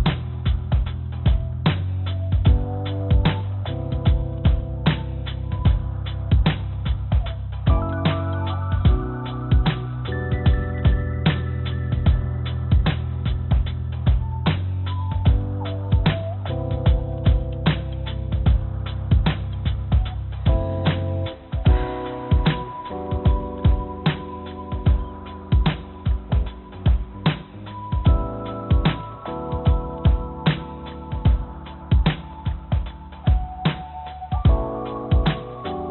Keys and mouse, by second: 1.6 click, 3.0 ctrl+z, 4.0 g, 7.5-12.1 drag, 13.5 shift+a, 19.8 click, 20.0 click, 20.3 click, 20.6 click, 21.0 click, 21.3 click, 21.6 click, 21.7 click, 22.0-23.0 drag, 23.1 click, 24.2 click, 24.4 click, 24.5 click, 24.6 click, 24.8 click, 25.0 click, 25.4 click, 27.6 r, 27.8 y, 28.4 9, 28.5 0, 30.6 r, 35.6 click.